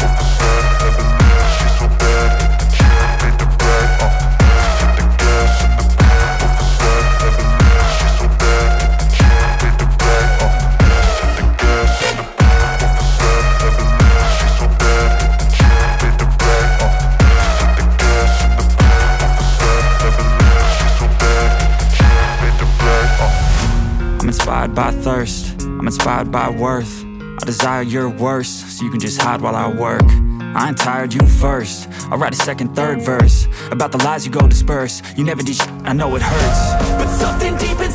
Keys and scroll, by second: 0.0-9.5 typing, 2.0 Return, 9.9 ctrl+s, 20.4 BackSpace, 20.7 Left, 20.9 Left, 21.4 shift+8, 22.0 End, 22.9-23.9 typing, 24.0 ctrl+s, 26.0 Return, 26.2 Return, 26.5 Up, 27.9 i, 28.2 f, 28.9 Return, 29.3-31.1 typing.